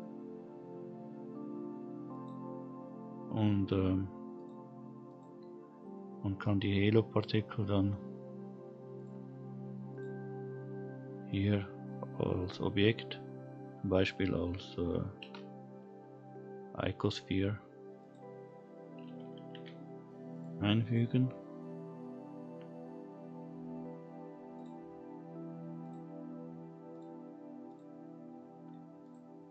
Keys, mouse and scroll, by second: 2.1 click, 2.6-3.0 scroll up 1, 3.0-3.8 scroll down 1, 4.3 click, 5.0 click, 7.1 click, 8.9 click, 9.9 click, 11.3 click, 12.4-13.7 drag, 15.2 shift+a, 19.5 g, 20.8 click, 24.0-24.5 scroll down 1, 24.5-25.9 drag, 26.9-29.1 drag.